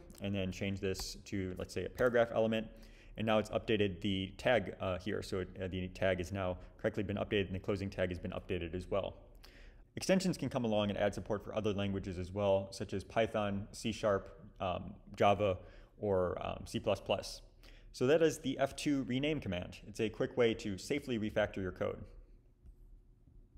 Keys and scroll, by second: 1.0 p, 2.0 Return.